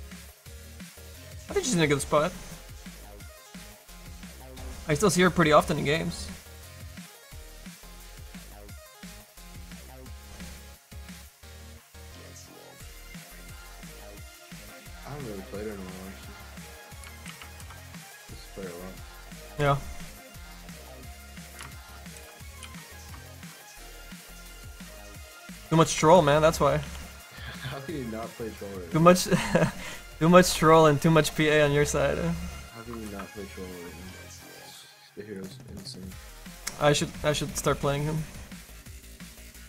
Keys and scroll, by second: 22.9 s, 25.2 s, 26.8 s.